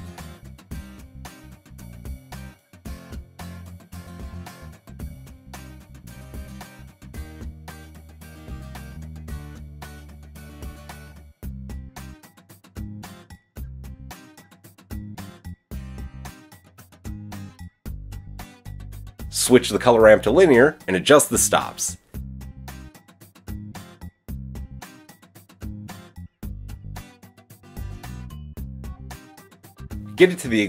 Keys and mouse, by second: 0.6 middle click, 0.8-4.8 drag, 4.8 shift+middle click, 5.3-13.2 shift+drag, 14.0-18.4 drag, 18.9-28.8 drag, 29.2-30.6 drag.